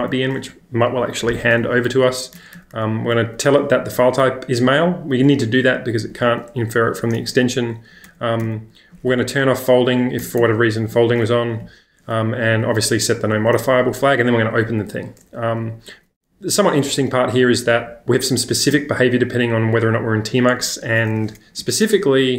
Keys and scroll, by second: 2.0-2.7 typing, 8.1 shift+w, 8.4 shift+w, 10.2 shift+w, 10.4 shift+w, 12.5 l, 12.9 l, 13.2 l, 13.4 l, 16.3-18.7 typing, 21.4 Escape, 21.8 j, 21.9 j.